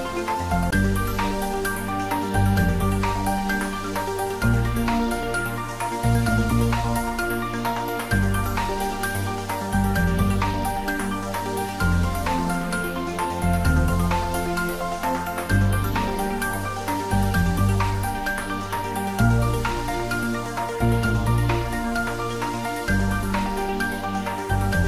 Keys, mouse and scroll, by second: 7.5 click, 10.2-11.8 scroll up 1, 13.5 3, 14.1 shift+click, 16.9-17.6 scroll up 1, 18.1 shift+click, 20.2 i, 23.1 g, 24.6 e.